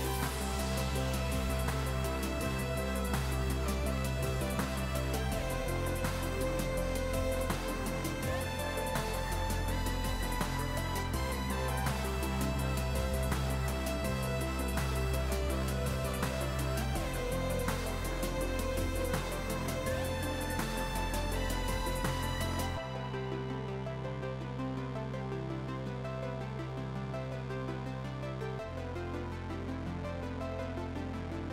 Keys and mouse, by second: 5.3 click, 6.9 click, 7.9 Escape, 8.3 shift+click, 9.1 s, 10.1 ctrl+click, 10.6 ctrl+x, 10.7 click, 14.5 click, 20.7 click, 21.0 s, 21.6 ctrl+click, 22.2 click, 28.4 click.